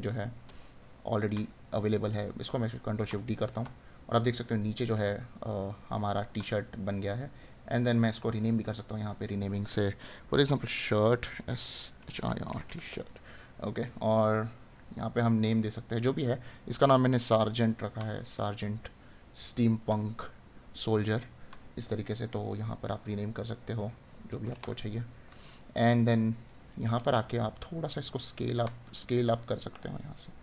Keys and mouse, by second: 0.4 right click, 3.1 right click, 5.7 right click, 16.2 right click, 20.5 right click, 27.5 right click.